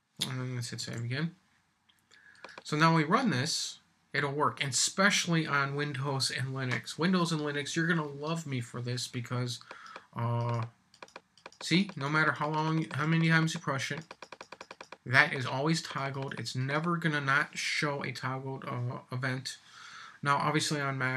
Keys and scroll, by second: 0.8 super+s.